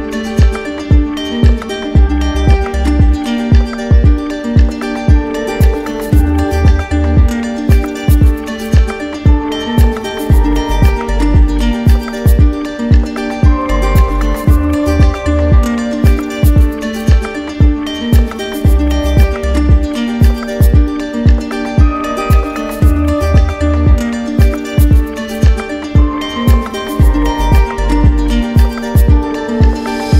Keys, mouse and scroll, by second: 1.5 click, 4.2 alt+click, 5.2 alt+click, 5.6 alt+click, 6.8 click, 7.7 alt+click, 10.3 click, 12.1-16.0 drag, 17.5 click, 19.4 alt+click, 20.5 click, 22.0 click, 23.7 alt+click, 24.3 alt+click, 27.7-28.7 drag, 29.3 click.